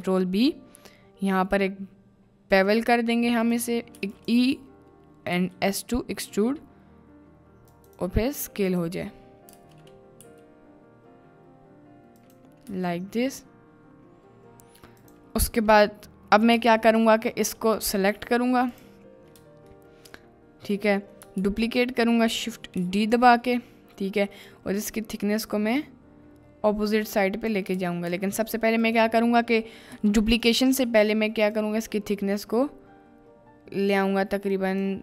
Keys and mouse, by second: 0.0 ctrl+b, 3.4 click, 4.4 e, 5.4 s, 7.7 click, 9.9 ctrl+z, 10.4 s, 12.7 Tab, 15.0 click, 15.4 middle click, 16.5 Tab, 17.7 click, 18.7 click, 19.8-20.7 shift+middle drag, 21.4 shift+s, 22.7 shift+d, 23.1 click, 24.5-27.5 drag, 27.8 ctrl+z, 28.1 ctrl+z, 28.8 click, 29.9 g, 31.7-34.8 drag.